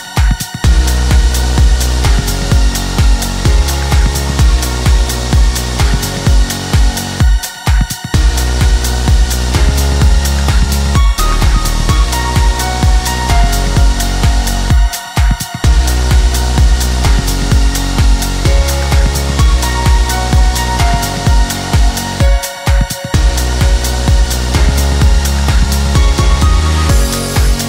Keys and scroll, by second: 1.9 Escape.